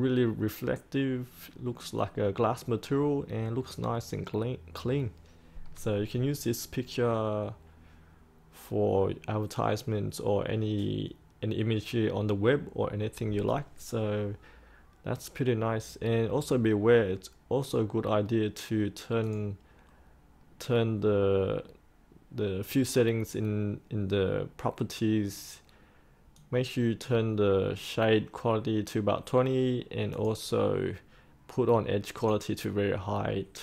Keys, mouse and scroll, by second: 16.4 click, 20.1-33.2 drag.